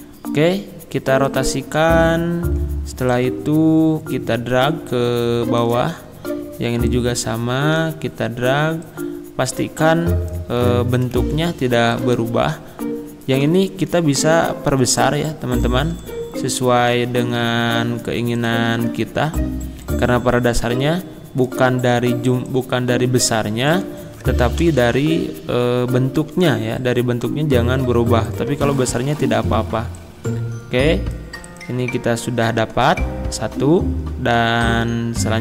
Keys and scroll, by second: 24.2 ctrl+a, 24.7 ctrl+], 26.2 ctrl+[.